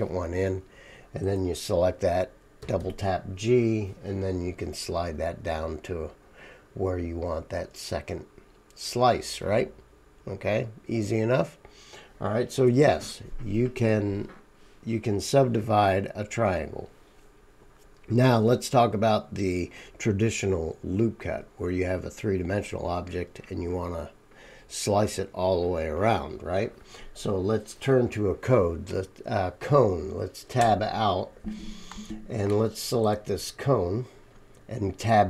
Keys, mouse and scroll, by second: 2.6 g, 30.6 Tab.